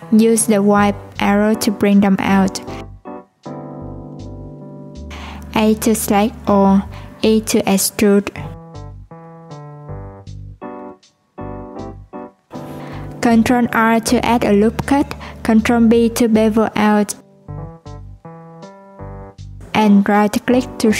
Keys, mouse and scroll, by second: 0.3 shift+click, 0.9 middle click, 1.7 click, 5.1 middle click, 5.5 a, 8.5 middle click, 9.4 Tab, 9.8 ctrl+2, 12.1 Tab, 13.0 ctrl+r, 19.0 click, 19.8 right click.